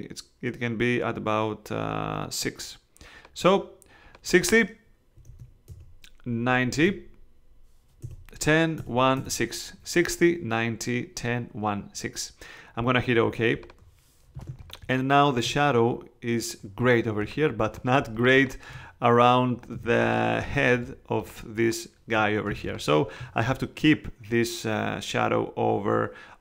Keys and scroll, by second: 4.9-7.3 typing, 8.0 Tab, 14.3 space, 19.7 space, 22.5 space.